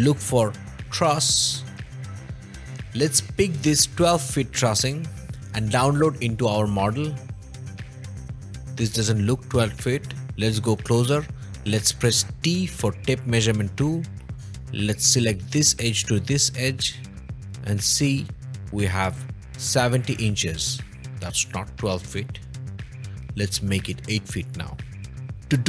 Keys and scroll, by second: 0.7-1.1 typing, 1.9 Return, 12.5 t, 25.3 v.